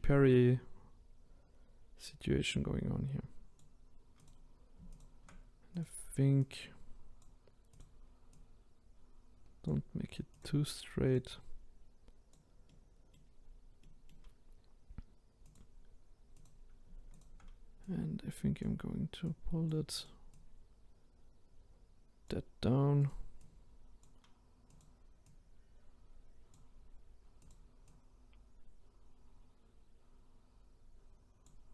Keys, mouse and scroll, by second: 4.2 click, 5.8 click, 6.4 click, 8.4 click, 10.4 click, 12.7 middle click, 13.4-13.8 scroll down 2, 13.8-15.5 middle drag, 15.5 click, 16.4 click, 17.2 shift+click, 19.3 click, 20.4 click, 23.1 click, 24.8 click, 25.4 click, 27.5 click, 27.9 click.